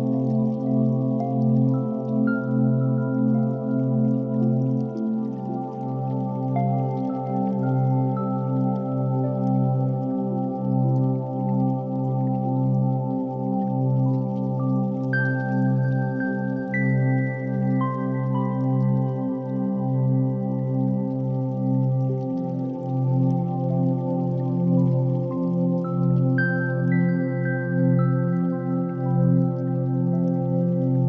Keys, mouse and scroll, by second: 6.1 9, 6.2 0, 6.5 Return, 7.6 g, 7.8 x, 9.1 click, 9.3 g, 9.6 y, 12.3 click, 13.8-15.4 middle drag, 16.3 KP_1, 16.5 shift+a, 21.8 KP_0, 25.1-26.0 drag, 26.6-27.5 drag, 28.5-31.0 drag.